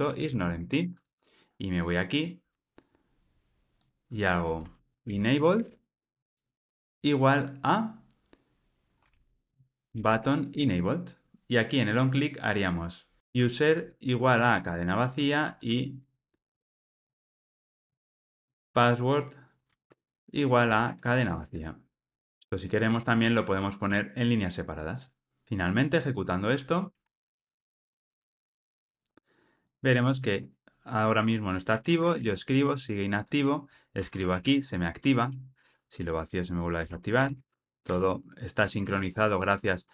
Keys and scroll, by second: 6.7 Return, 10.5 Return, 19.9 Return, 22.2 ctrl+alt+o, 25.5 ctrl+r.